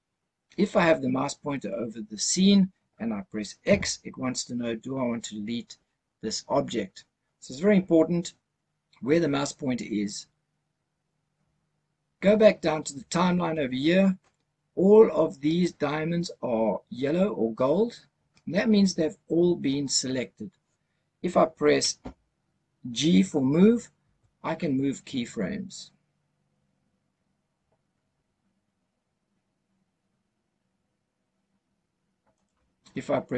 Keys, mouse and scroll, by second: 3.5 x, 24.1 g, 32.2 right click.